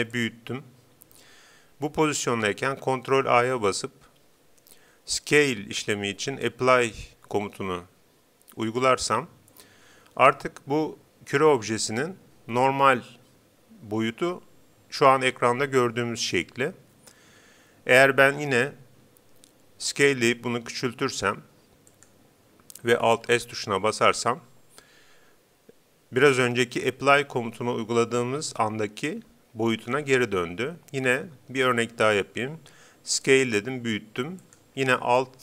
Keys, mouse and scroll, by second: 0.3-2.1 drag, 3.1 ctrl+a, 19.9 s, 22.1-23.7 drag, 23.3 alt+s, 33.1 s, 34.5-35.4 drag.